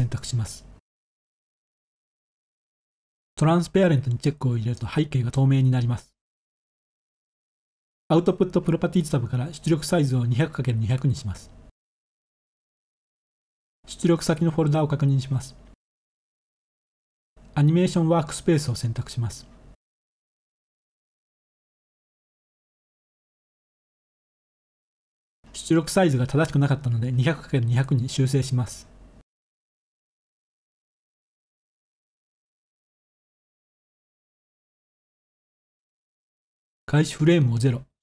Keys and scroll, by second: 8.3-8.6 typing, 10.6-11.1 typing, 16.5 ctrl+s, 26.6-27.6 typing, 34.5 0.